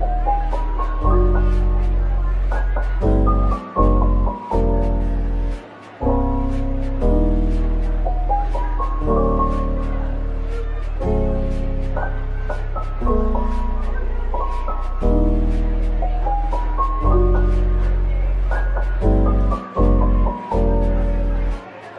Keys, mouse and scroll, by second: 0.7-1.7 typing, 2.9-4.9 typing, 6.7 typing, 7.1 scroll down 1, 7.4 middle click, 8.1 Tab, 9.0-10.8 typing, 12.1 middle click, 14.2 typing, 14.8 ctrl+b, 17.8-18.2 scroll up 1, 18.6 double click, 19.0 Tab, 19.6 Tab, 20.5 typing, 21.6 typing.